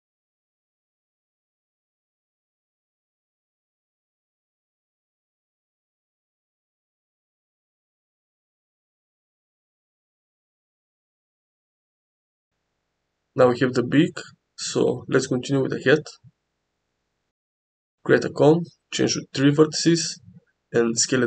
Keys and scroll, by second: 2.0 g, 5.4 g, 7.1 Tab, 8.8 Tab, 9.7 s, 10.1 y, 11.1 Tab, 14.6 g, 15.2 x, 16.7 shift+a, 19.4 shift+a.